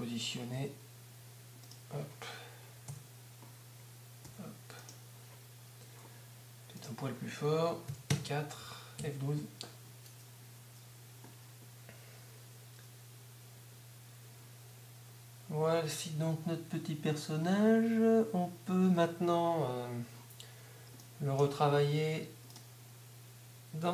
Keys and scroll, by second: 8.1 Up, 9.0 F12, 18.8 Escape.